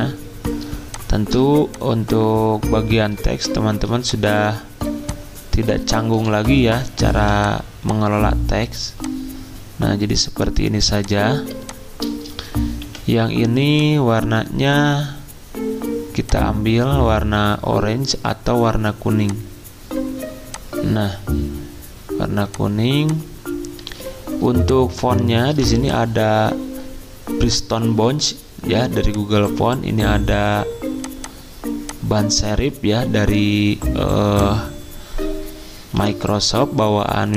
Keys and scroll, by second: 4.8 z, 6.1 c, 7.1 v, 10.7 z, 12.8 t, 23.8 z, 25.5 v, 36.0 p.